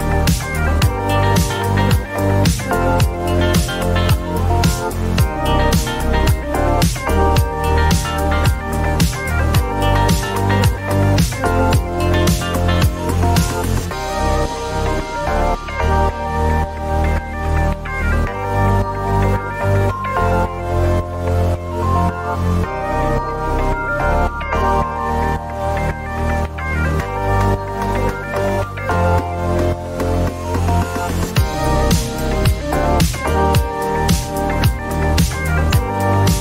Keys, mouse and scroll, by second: 0.0-1.0 typing, 2.0 Return, 4.0 Return, 4.3-6.4 scroll, 6.5 click, 8.6 click, 9.7-10.5 typing, 12.9 click, 13.7 typing, 14.2 Return, 15.8 typing, 17.3 click, 18.3 typing, 19.0 Return, 21.4 click, 23.2-25.2 typing, 29.3 click, 32.0-34.2 middle drag, 32.0-32.6 scroll, 32.6-34.2 scroll, 34.2 click.